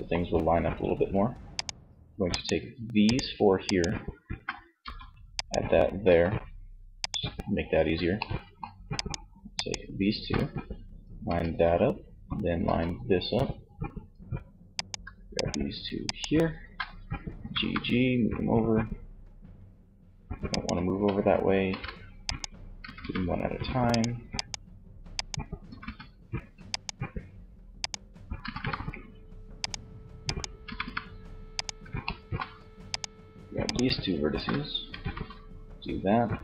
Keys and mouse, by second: 0.7-3.9 right drag, 3.9 f, 5.1 g, 6.0-7.2 drag, 7.2 middle click, 10.4 f, 11.7 f, 16.4 g, 19.9 click, 20.7 ctrl+z, 21.4 click, 21.9 g, 24.6 g, 27.4 g, 29.6 g, 31.2-32.5 middle drag, 34.2 shift+f, 35.6 f.